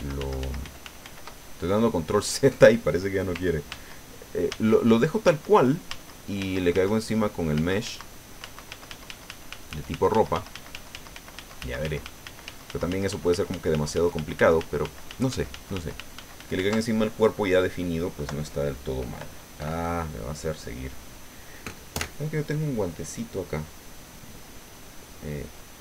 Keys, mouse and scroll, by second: 3.7 ctrl+z, 4.5 ctrl+z, 5.2 ctrl+z, 7.5 ctrl+z.